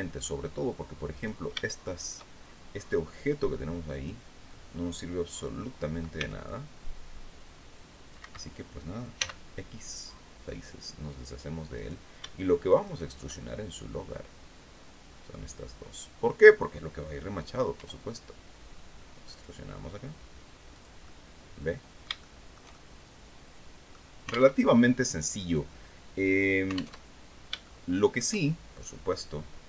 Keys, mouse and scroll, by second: 0.6 right click, 1.3 shift+right click, 3.4 click, 5.6 c, 5.9-7.8 drag, 7.7 Escape, 8.6 x, 9.5 click, 11.2 right click, 12.3 shift+right click, 12.9-15.9 shift+middle drag, 17.2 e, 20.2 click, 20.5-23.6 middle drag, 24.0 alt+Tab, 26.4 alt+Tab, 26.8 alt+scroll down 3, 27.1 shift+click, 29.4 click.